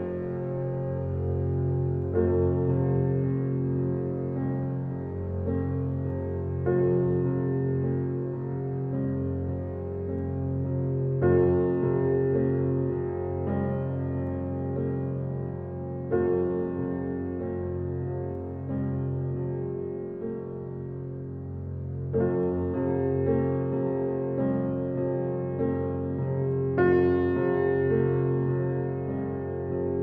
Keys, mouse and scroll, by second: 1.1 g, 2.8 middle click, 3.0 Tab, 3.4 click, 3.5-4.1 scroll down 3, 4.1 shift+middle click, 5.1 click, 6.7-9.1 shift+middle drag, 9.1 click, 9.5 click, 10.0 scroll up 5, 10.2-11.0 shift+middle drag, 11.4 click, 12.3 click, 14.0 click, 14.7-15.4 drag, 16.3 click, 16.9 click, 18.3-19.1 drag, 20.1-23.9 drag, 24.7 scroll up 4, 24.9 shift+middle click, 25.3-25.7 scroll up 1, 28.9-30.0 middle drag.